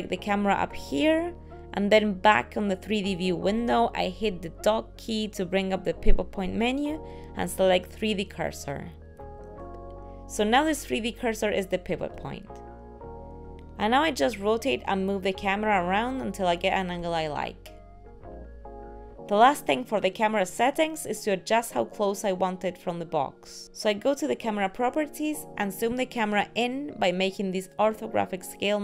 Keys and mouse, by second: 0.7 click.